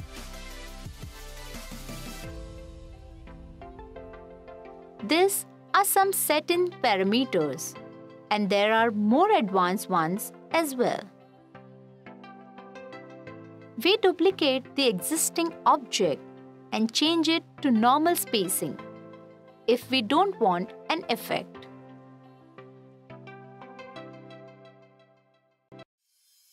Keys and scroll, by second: 4.9 f, 18.0 f.